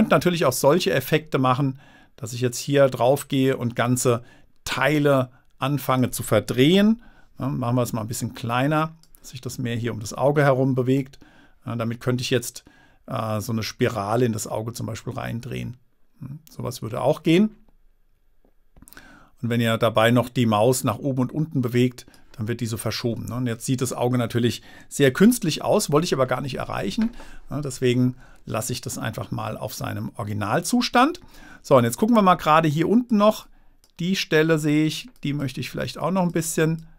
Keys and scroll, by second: 7.1 super+z, 25.5 super+z.